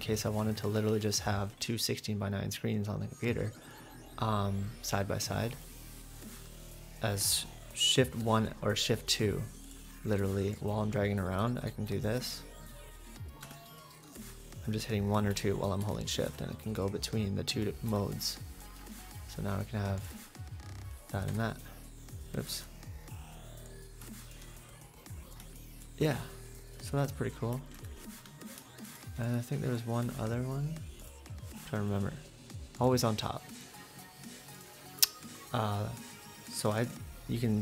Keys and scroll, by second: 21.3 Escape, 22.5 super+`, 27.7 @, 28.8 !.